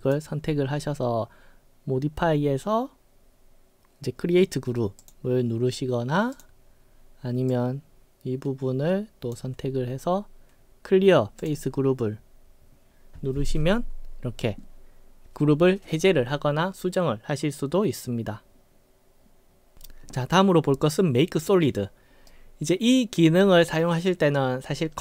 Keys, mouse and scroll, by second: 5.0 click, 6.3 click, 7.5-9.4 drag, 11.5 click, 22.3-23.3 right drag.